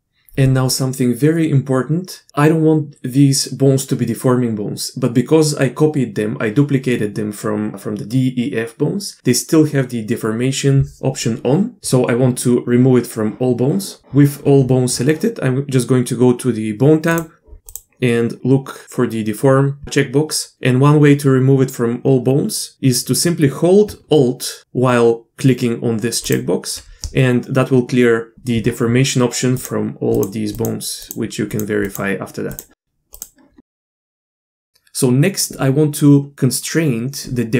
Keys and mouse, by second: 17.1 click, 17.7 click, 26.2 alt+click, 29.6 click, 31.8 click, 32.5 drag, 33.2 click, 34.3 Tab.